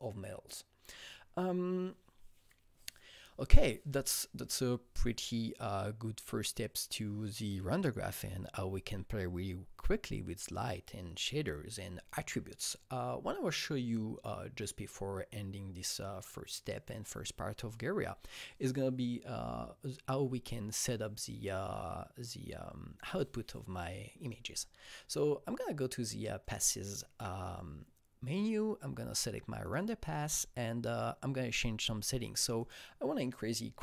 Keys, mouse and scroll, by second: 26.4 click, 26.4 click, 29.6 click, 32.5 click, 32.7 double click.